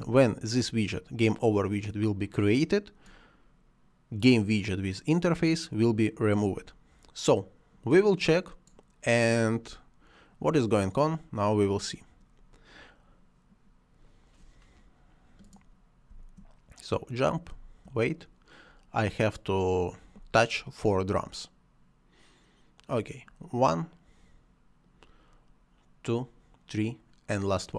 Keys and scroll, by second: 16.1 space.